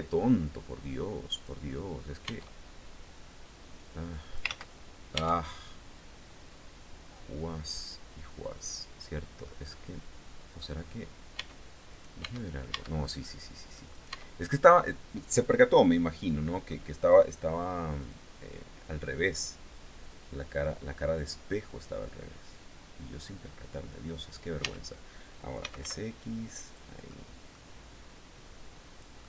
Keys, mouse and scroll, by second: 0.9 click, 1.8 Tab, 2.7-4.1 drag, 4.0 ctrl+z, 4.7 Tab, 6.0-8.7 drag, 9.0-10.2 drag, 10.2 scroll up 2, 10.9 Tab, 11.5 right click, 11.8 Tab, 12.7 middle click, 13.5 right click, 13.6 Tab, 15.3-16.4 middle drag, 17.5 click, 18.7-23.7 drag, 24.2 Tab, 24.9-25.8 typing, 26.2 click, 26.7 middle click, 27.9 click, 28.8-29.2 middle drag.